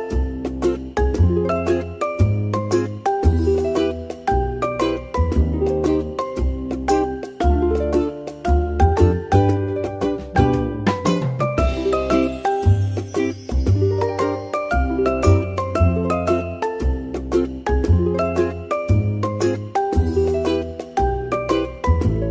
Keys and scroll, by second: 5.4 ctrl+z, 8.1 ctrl+z, 11.1 Tab.